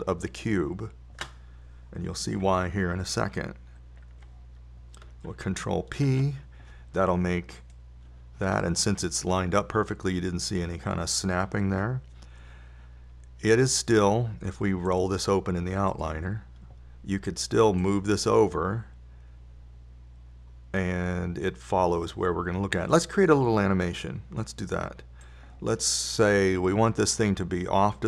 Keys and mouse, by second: 1.3-3.1 drag, 7.5 ctrl+p, 16.3-21.3 drag, 26.7-28.0 drag.